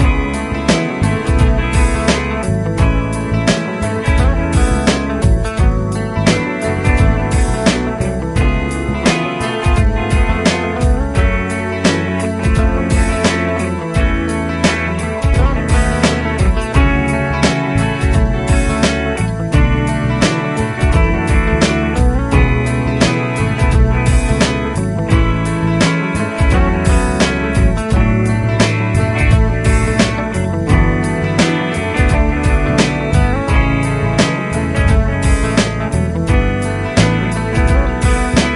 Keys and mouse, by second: 6.6 shift+click, 12.4 shift+click, 34.4 |, 36.1 shift+click.